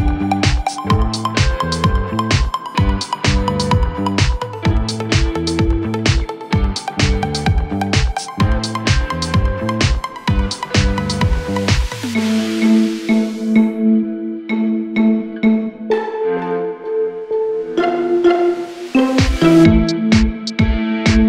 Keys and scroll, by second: 1.1 ctrl+z.